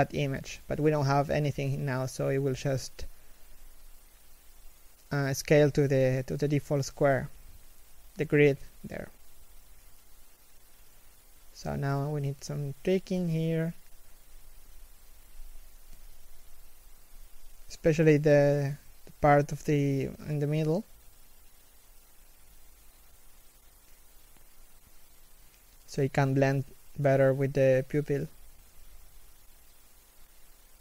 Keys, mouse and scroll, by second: 21.5 scroll up 1, 22.4 shift+middle click, 27.1 scroll down 1.